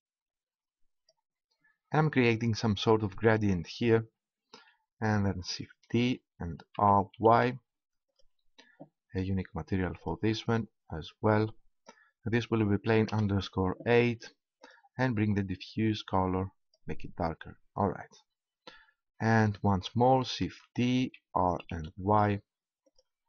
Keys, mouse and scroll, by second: 5.8 shift+d, 8.1-12.4 drag, 14.6-16.4 drag, 20.3 shift+d, 23.0-23.2 drag.